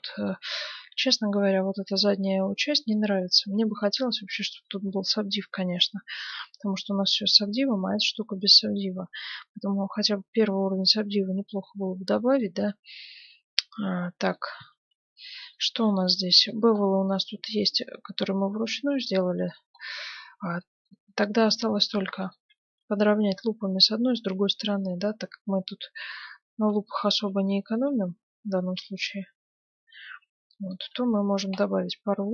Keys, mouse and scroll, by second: 1.2-6.6 middle drag, 3.8 Tab, 7.9 ctrl+1, 9.5-11.6 middle drag, 11.7-23.1 middle drag, 14.7 Tab, 21.8 ctrl+r, 26.6 ctrl+r, 31.1 Tab, 31.5-32.3 middle drag.